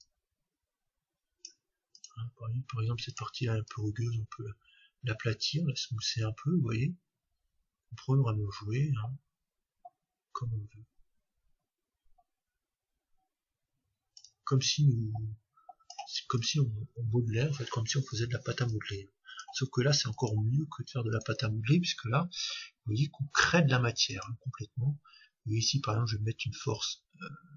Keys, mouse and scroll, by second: 0.0-1.8 drag, 1.9-5.5 drag, 14.3-16.2 drag, 16.4-18.2 drag, 18.7-23.0 drag, 24.9-26.7 scroll down 1, 26.7-27.5 drag.